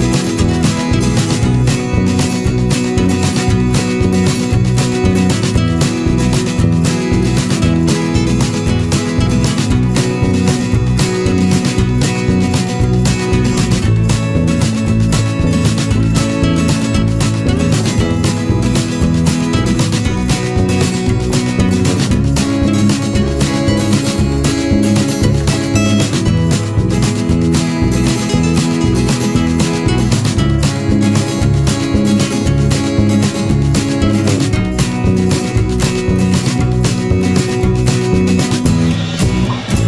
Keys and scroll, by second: 0.8 ctrl+-, 1.9 ctrl+z, 7.1 ctrl+=, 7.8 ctrl+z, 20.9 ctrl+-, 27.7 ctrl+-, 28.6 ctrl+z, 33.5 ctrl+=.